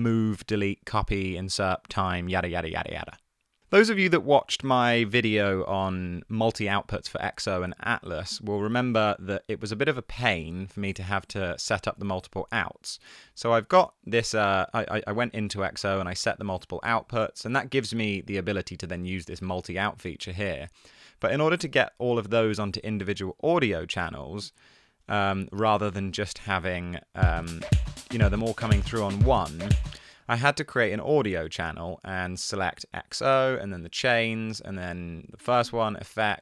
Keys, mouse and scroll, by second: 12.0 Tab, 25.2 Tab, 25.5 space, 28.7 Tab, 29.3 Tab, 29.9 space, 30.4 super+t.